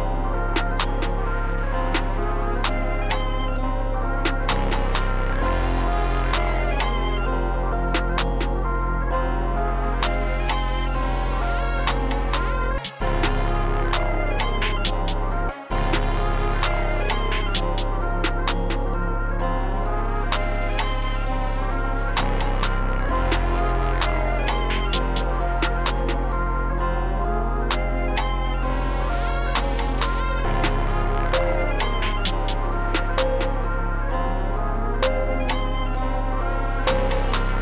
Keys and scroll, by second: 2.6 e, 7.1 super+b, 7.5 super+s, 7.7 e, 8.5 p, 8.6 super+s, 12.7 space, 12.9 space, 13.5 e, 14.2 super+Down, 14.8 p, 15.4 space, 15.6 space, 17.9 e, 20.2 super+b, 20.6 e, 21.9 p, 22.0 super+s, 22.7 super+s, 23.7 super+s, 30.8 s, 31.6 4, 32.4 t, 34.3 s, 35.5 super+s, 35.8 p, 36.0 super+s, 37.0 s.